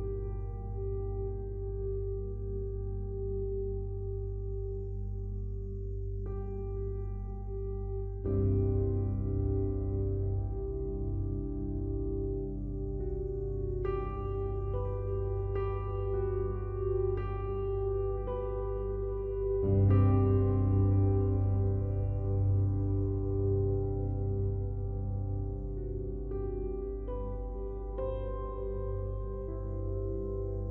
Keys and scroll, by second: 3.0 ctrl+z, 10.8 ctrl+z, 27.0 ctrl+z.